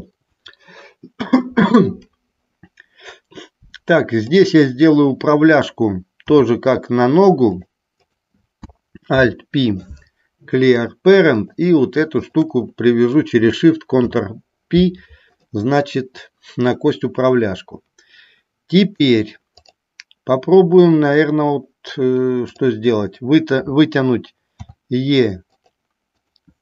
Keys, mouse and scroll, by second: 4.4 click, 8.2 click, 9.3 alt+p, 11.5 click, 12.3 shift+click, 14.1 ctrl+p, 19.7 click, 25.8 click, 25.8 e, 26.3 click.